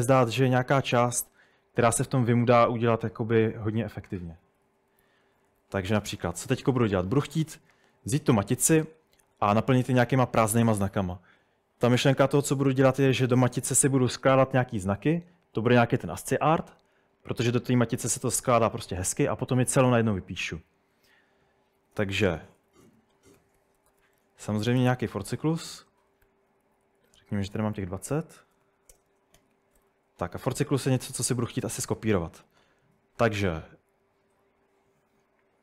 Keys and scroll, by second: 0.1-1.7 typing, 2.9-11.4 typing, 21.4-24.8 typing, 26.3 Escape, 26.6-30.3 typing, 29.0 Return.